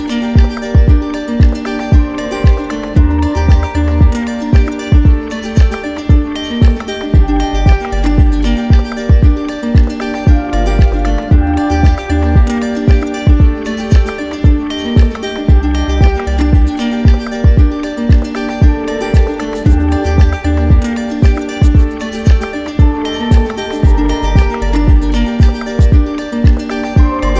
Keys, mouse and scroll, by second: 0.0-1.0 typing, 5.1 click, 14.3 click, 14.7 ctrl+z, 23.5 click, 27.0 click.